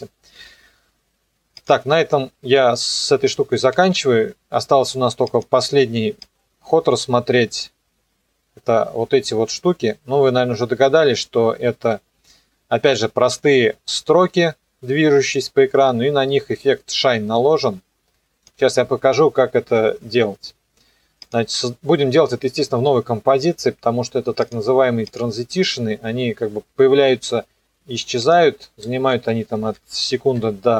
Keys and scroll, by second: 3.7 ctrl+s, 29.2 Left, 29.4 Delete, 30.4 KP_2.